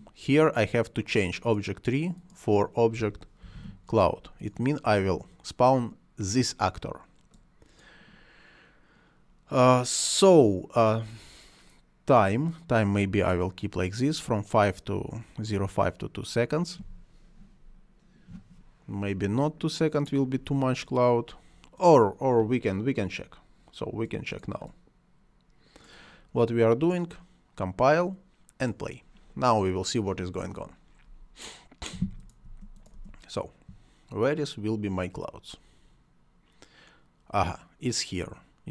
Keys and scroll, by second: 2.7-4.0 typing, 32.4 space.